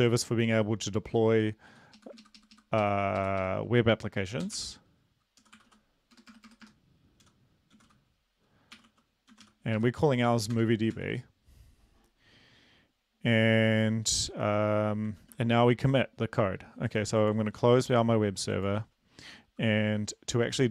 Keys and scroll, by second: 1.1 Up, 1.6 End, 2.0 Left, 2.5 ctrl+shift+Left, 2.8 ctrl+shift+Right, 3.4 shift+Right, 4.4-6.5 typing, 7.7 typing, 8.7-9.8 typing, 10.5 Return, 11.0 ctrl+s, 15.2 ctrl+`, 17.4 ctrl+c, 18.1 ctrl+c.